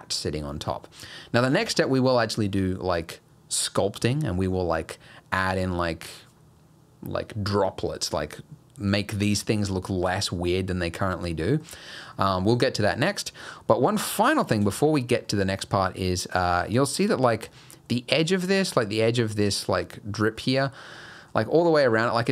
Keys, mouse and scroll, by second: 0.5 middle click, 1.6 alt+a, 4.8-6.8 scroll up 1, 10.1 middle click, 11.1 middle click, 11.9 scroll down 2, 12.2 middle click, 13.0 scroll up 1, 13.4 middle click, 13.8-14.2 scroll up 3, 14.6 middle click, 14.6 scroll down 1, 14.8 shift+middle click, 15.3 middle click, 15.7-16.2 scroll up 2, 16.5 shift+middle click, 16.7-17.5 shift+scroll up 6, 17.5 middle click, 20.4 middle click, 20.7 scroll down 1, 21.0 middle click, 21.8 scroll down 1, 22.0 middle click.